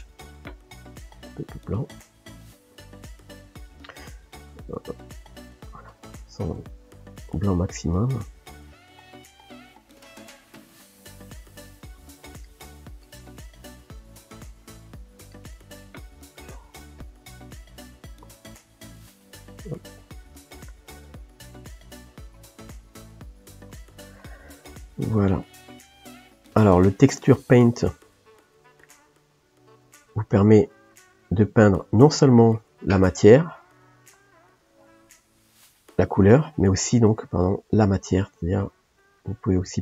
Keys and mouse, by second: 7.6-9.5 drag, 9.5 shift+middle click, 10.5-12.5 drag, 12.5-18.6 middle drag, 18.6 KP_1, 19.7-28.1 ctrl+middle drag, 28.1 f, 29.1-34.5 drag, 34.5-37.1 middle drag, 37.1-39.7 drag, 39.7-39.8 ctrl+middle drag.